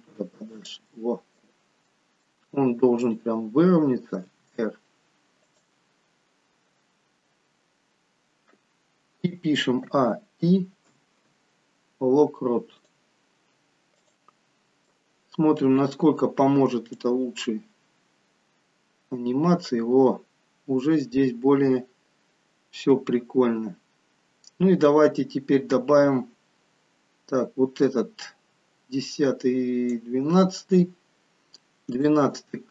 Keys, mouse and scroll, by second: 1.1 middle click, 2.0 middle click, 3.2 click, 4.4 r, 6.0-6.6 scroll down 2, 11.0 a, 11.0 i, 14.1 click, 14.6-15.0 scroll down 4, 15.0 middle click, 17.1 click, 31.3-32.1 scroll up 2, 32.1 shift+middle click, 32.1-32.6 scroll up 1.